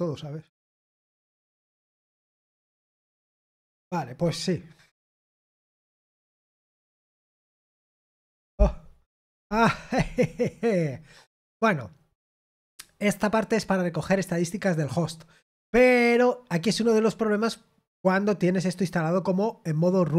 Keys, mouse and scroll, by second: 12.2-14.0 drag.